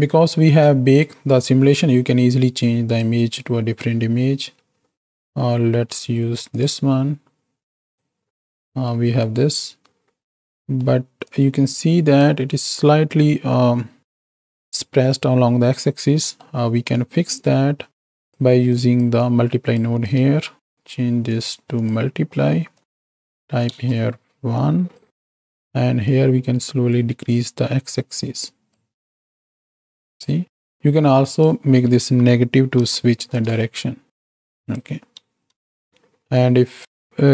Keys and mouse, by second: 2.9 click, 8.9 middle click, 10.4 middle click, 11.2-12.2 drag, 16.2 middle click, 16.9-18.3 drag, 18.7-19.0 drag, 19.3 click, 19.9 click, 20.5 shift+d, 21.8-22.9 drag, 23.0 click, 24.5 click, 26.0-28.7 shift+drag, 29.1-30.3 drag, 31.4-33.4 drag, 34.7-35.8 drag, 36.4-37.3 drag.